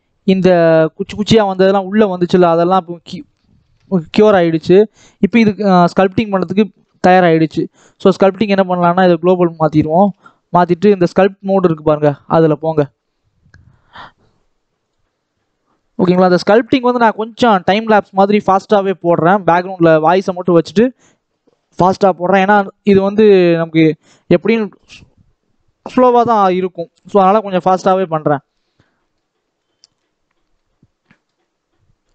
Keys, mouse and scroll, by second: 2.0-2.4 scroll down 4, 2.4-3.5 middle drag, 3.5 ctrl+s, 5.1 click, 6.1-6.5 scroll down 1, 6.5-8.2 shift+middle drag, 8.2-9.7 drag, 9.7 ctrl+s, 12.9 click, 17.5 middle click, 18.0-19.6 scroll up 1, 21.9 scroll down 1, 22.0 middle click, 22.4 scroll up 2, 22.6-24.1 middle drag, 24.1-24.7 scroll down 1, 24.7-26.8 scroll down 1, 26.8 KP_1, 28.2 scroll down 1, 28.5 middle click, 29.2 scroll up 2, 29.5 scroll down 1, 29.6-31.3 middle drag, 31.3-32.0 scroll up 1.